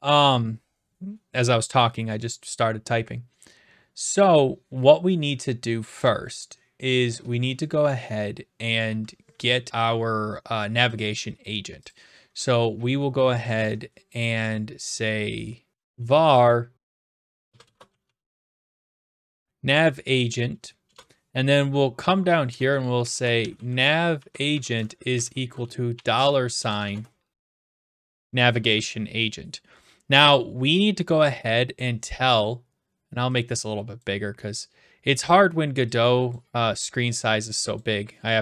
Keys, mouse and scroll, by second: 11.9-12.9 drag, 15.5-19.4 typing, 15.7 click, 20.8 BackSpace, 22.1 click, 22.5 Return, 23.1-24.1 typing, 24.5 Tab, 25.2-28.0 typing, 31.8-32.9 drag, 34.0-35.0 drag, 36.3 click, 37.8 click.